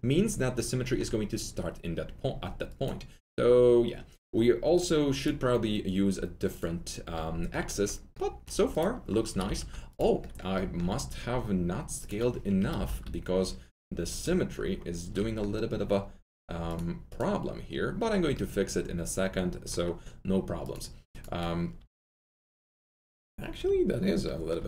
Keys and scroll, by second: 9.3 F3, 9.3-10.0 typing, 12.5 F3, 12.6-13.3 typing, 15.1 typing, 21.7 1, 23.5 1.